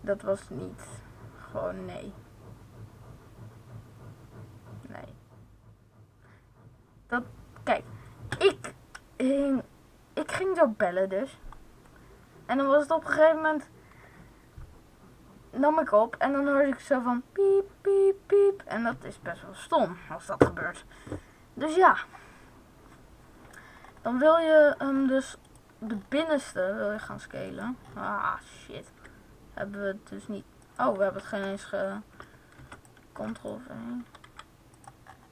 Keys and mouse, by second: 24.7 middle click, 25.4 right click, 25.8-27.1 middle drag, 27.5-28.9 middle drag, 28.9 s, 30.7-31.7 drag, 31.0 ctrl+z, 32.3 middle click, 32.5 ctrl+c, 33.1 ctrl+v, 34.2 s, 34.8 click.